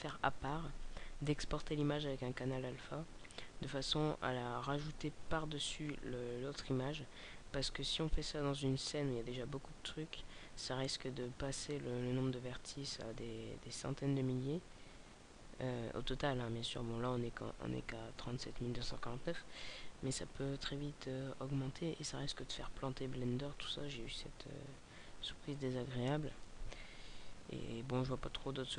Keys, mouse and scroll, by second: 27.6-28.6 scroll up 6.